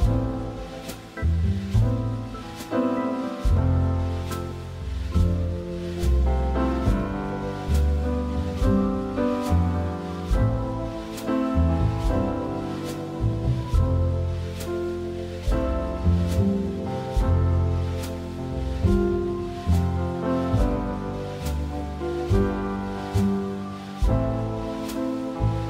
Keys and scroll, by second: 0.1 Escape.